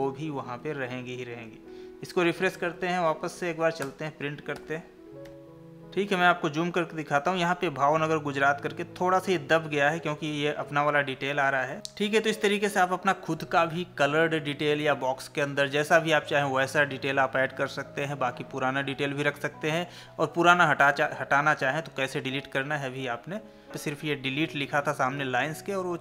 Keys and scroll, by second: 0.0 Escape, 2.7 Escape, 4.6 ctrl+p, 5.3 Left, 21.1 Tab, 23.5 ctrl+z.